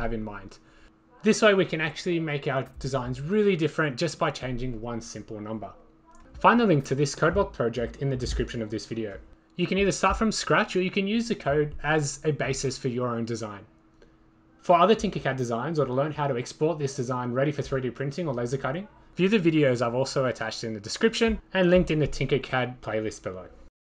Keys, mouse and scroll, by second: 2.0-3.3 drag, 2.7 4, 3.7-5.2 drag, 6.0-7.4 drag, 6.8 8, 10.1 click, 10.8 5, 11.4 click, 11.5 click, 12.5 click, 15.2 click, 15.4 1, 16.4 click, 20.2-21.7 right drag, 23.0 click.